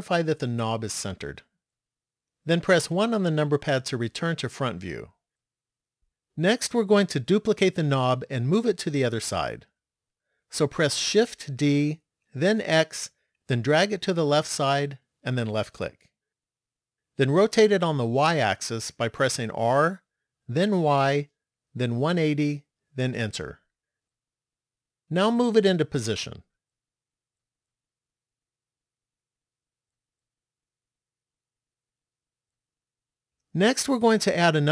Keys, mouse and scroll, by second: 2.9 KP_1, 11.6 shift+d, 19.7 r, 26.4 click, 31.1-32.3 scroll down 3, 34.0 shift+middle click.